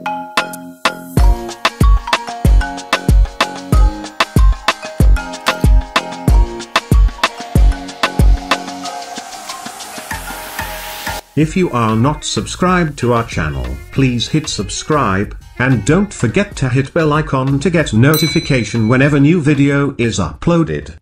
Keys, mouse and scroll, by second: 3.1 click.